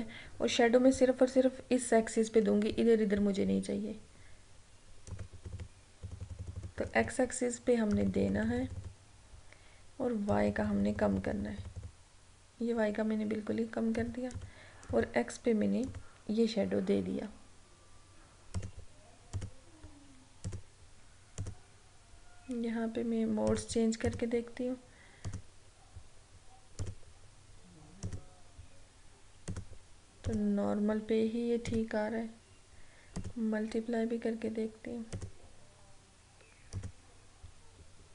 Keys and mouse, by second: 5.2 click, 18.6 click, 20.6 click.